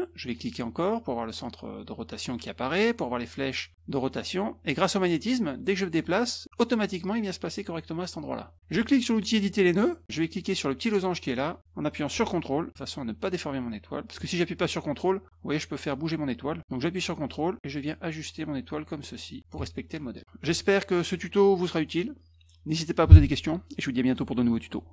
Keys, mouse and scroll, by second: 0.3 click, 4.1-6.4 drag, 9.3 click, 11.4-19.5 drag, 20.7 click, 21.1 click, 21.4 click, 23.6 click.